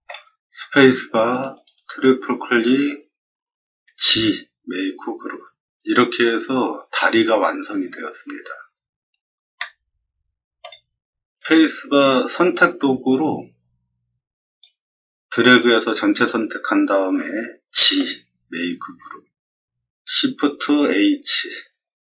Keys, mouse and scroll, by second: 0.5 space, 1.2 click, 1.5 click, 1.7 click, 3.8 g, 9.5-10.5 shift+middle drag, 10.8 middle click, 13.0-14.5 drag, 17.8 g.